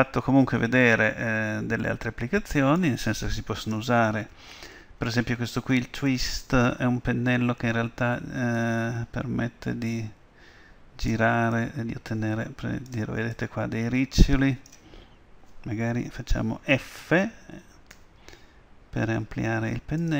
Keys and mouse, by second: 1.1-3.7 middle drag, 3.7-5.6 drag, 8.7-10.6 drag, 11.6-15.3 drag, 18.0 f.